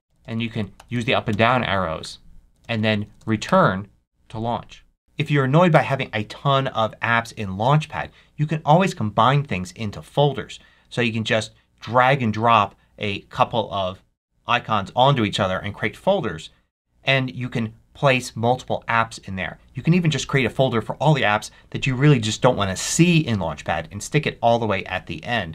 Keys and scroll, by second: 0.7 Up, 1.2 Down, 2.5 Down, 3.4 Return.